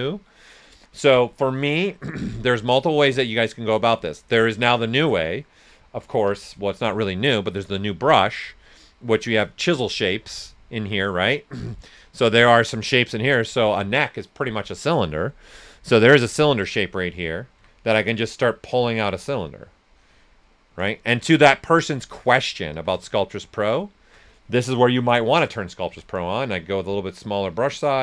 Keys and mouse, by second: 2.2 typing, 2.3 alt+right click, 2.8 ctrl+right click, 4.6 right click, 6.2 b, 9.7 click, 16.0 click, 17.5 x, 17.7-19.8 drag, 19.8 right click, 21.1 ctrl+z, 21.5 right click, 22.7 s, 22.8-24.8 drag, 24.8 click, 25.8 s, 25.9-28.0 drag, 26.7 s.